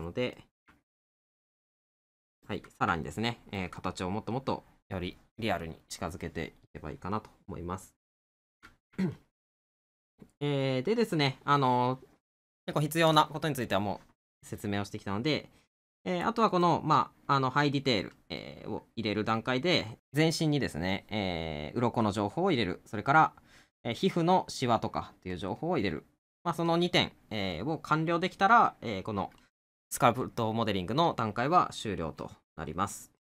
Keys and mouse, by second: 0.4 middle click, 3.0 middle click, 9.2 middle click.